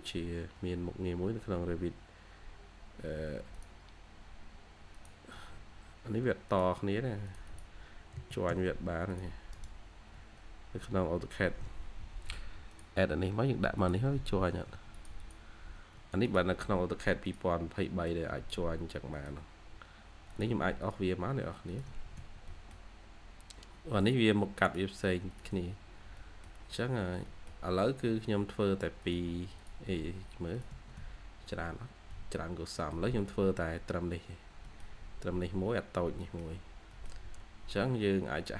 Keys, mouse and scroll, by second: 0.0 Escape, 0.4 Escape, 5.3 Escape, 5.4-6.0 scroll up 1, 6.0-7.0 scroll up 1, 7.4 double click, 8.1 j, 9.4 right click, 10.0 Escape, 14.4 Escape, 14.5 scroll up 1, 14.6 Escape, 15.1 double click, 15.6-15.9 scroll down 1, 15.9 Escape, 16.4-17.7 scroll down 1, 17.7 middle click, 18.2 Escape, 18.4-19.0 scroll up 2, 19.0 middle click, 19.4-19.9 scroll up 1, 21.8 Escape, 22.1 Escape, 22.4 middle click, 22.4-23.0 scroll down 1, 23.0-24.0 scroll up 1, 25.4 Escape, 25.7-26.1 scroll down 1, 26.1 middle click, 26.4-27.1 scroll down 1, 27.1 scroll down 1, 27.2 middle click, 27.7-29.4 scroll up 1, 30.6 Escape, 30.9 Escape, 32.0 middle click, 32.8-33.4 scroll down 1, 33.4-34.5 scroll up 1, 34.5 middle click, 34.7-35.7 scroll down 1, 36.0 scroll up 1, 36.1 middle click, 36.5 scroll down 1, 36.7 scroll up 1, 36.8 middle click, 37.4-38.5 scroll up 1.